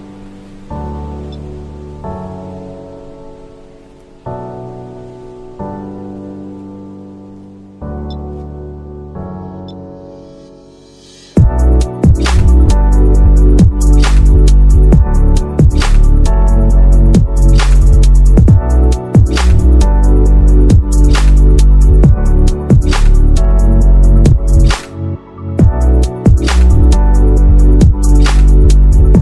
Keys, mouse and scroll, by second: 1.5 z, 2.2 space, 3.0 space, 5.8-8.6 typing, 10.0 space, 10.3 [, 10.7 z, 11.9 [, 12.2 ], 12.6 ], 14.3 z, 15.3-19.7 typing, 21.6 [, 23.2 ], 23.6 z, 24.6 ], 25.8-28.5 typing.